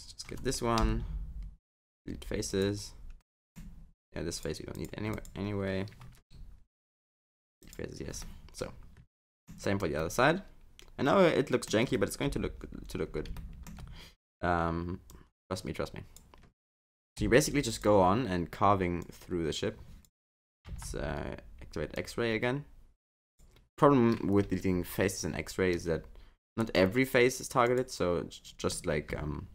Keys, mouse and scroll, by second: 0.8 Delete, 3.2 middle click, 4.3 click, 4.7 click, 5.1 click, 6.1 Delete, 8.2 middle click, 9.6 scroll down 3, 10.0 middle click, 12.2 KP_7, 13.0 scroll up 2, 13.4 shift+middle click, 15.1 click, 17.2 Delete, 19.0 click, 20.7 alt+z, 21.9 click, 24.4 Delete, 28.7 middle click.